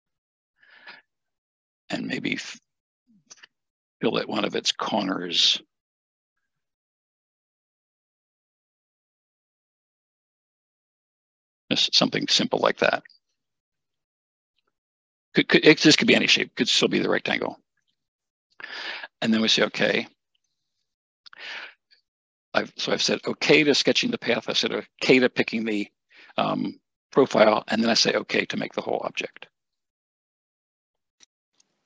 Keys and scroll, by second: 14.3 Escape.